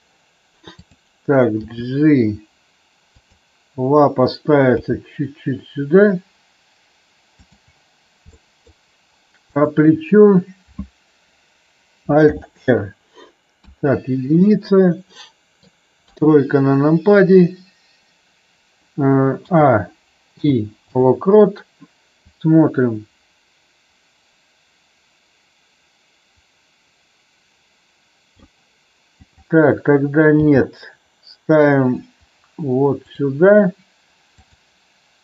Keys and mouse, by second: 0.8 click, 1.6 g, 3.1 click, 4.7 g, 7.3 click, 8.3 middle drag, 9.4-10.2 drag, 12.2 alt+r, 13.6 KP_1, 15.1-15.6 middle drag, 16.0 KP_3, 19.3 a, 20.3 i, 22.2-28.4 drag, 29.3 click, 30.3 g, 33.0 click, 34.4-35.0 drag.